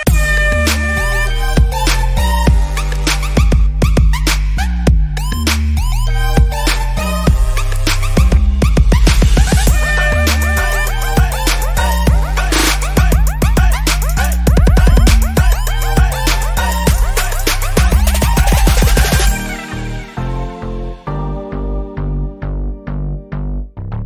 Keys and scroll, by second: 7.1 Down, 8.9 Down, 11.9 Down, 12.2 Down.